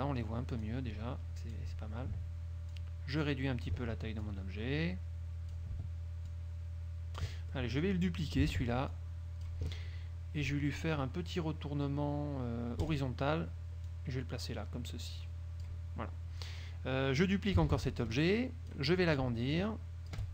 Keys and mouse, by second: 0.8-1.8 drag, 2.8-4.0 ctrl+drag, 4.3-5.8 ctrl+drag, 6.4-7.5 ctrl+drag, 7.6 ctrl+click, 8.6 ctrl+d, 9.0-9.8 ctrl+drag, 13.0 click, 14.0-16.0 drag, 17.8 ctrl+d, 18.3-19.0 ctrl+drag, 19.7-20.3 ctrl+shift+drag.